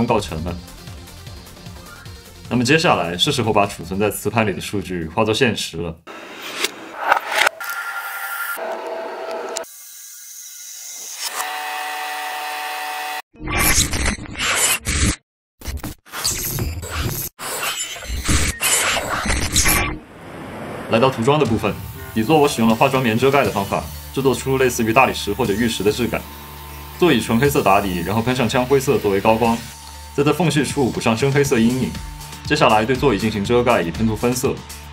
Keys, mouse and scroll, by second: 0.1 z, 2.6 f, 3.7 Tab, 4.6 g, 4.6 z.